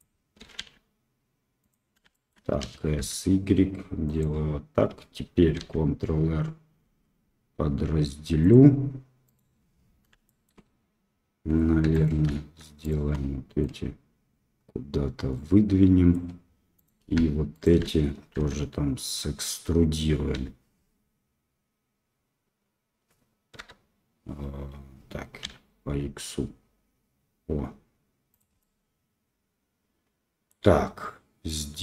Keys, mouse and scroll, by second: 0.3 s, 2.1 shift+click, 2.6 s, 5.6 ctrl+r, 10.2 shift+click, 11.8 2, 11.9 right click, 14.8-16.1 drag, 16.7 right click, 17.5 shift+click, 18.4 e, 28.5-30.4 middle drag, 31.4 middle click.